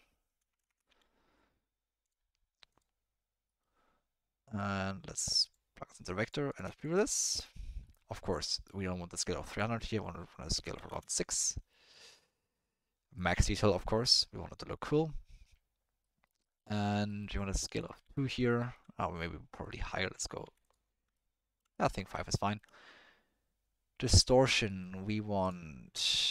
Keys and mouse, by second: 0.6 BackSpace, 4.5-5.6 drag, 6.2 click, 6.7 ctrl+shift+click, 7.1 middle click, 7.9 middle click, 8.6 middle click, 9.1 click, 9.6-10.9 drag, 12.0 middle click, 13.1 click, 16.2 middle click, 16.4 middle click, 16.9 middle click, 17.2 middle click, 17.8 click, 18.5 ctrl+middle click, 19.7 click, 21.1 ctrl+middle click, 21.7 middle click, 22.4 ctrl+click, 25.6-26.3 drag.